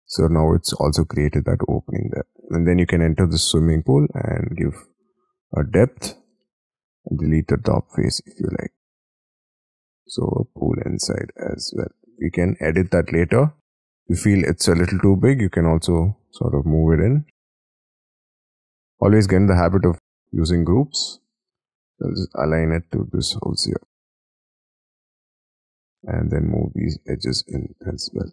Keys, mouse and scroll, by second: 0.2 F3, 1.9 double click, 2.9-6.1 scroll up 1, 6.1 space, 7.3 Delete, 8.1 Escape, 8.8 middle click, 10.7-11.3 scroll down 7, 11.9 middle click, 13.0-13.7 scroll up 13, 14.6 double click, 15.0 double click, 15.1-16.6 scroll down 5, 16.6-18.8 typing, 19.8 shift+click, 20.6 shift+middle click, 20.6 click, 20.9 shift+middle click, 21.8 m, 23.2 m, 24.1 shift+click, 24.6 shift+click, 24.8 scroll down 4, 25.3 Escape, 25.4 scroll up 4, 25.6 Escape, 25.9 double click, 26.4 double click, 26.8 ,, 27.2 m.